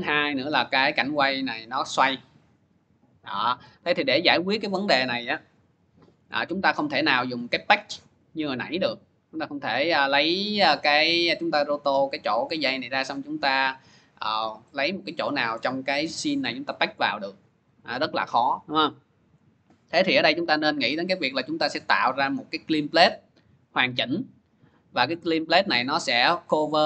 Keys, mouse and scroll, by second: 3.9 click, 6.5 scroll, 8.9 click, 8.9-11.7 middle drag, 15.4 middle click, 15.5-16.0 scroll, 19.4 scroll, 20.4-20.8 scroll, 24.7 scroll.